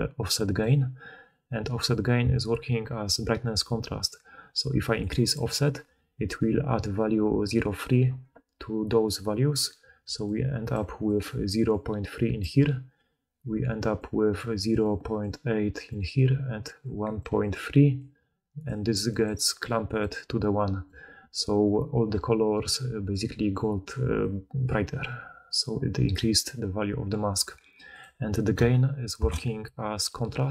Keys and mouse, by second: 3.6-10.7 drag, 9.9-21.2 typing, 12.3 click, 12.3 middle click, 12.3 right click, 17.1-19.9 drag, 17.1-19.9 middle drag, 17.1-19.9 right drag, 23.9 d, 26.1 d.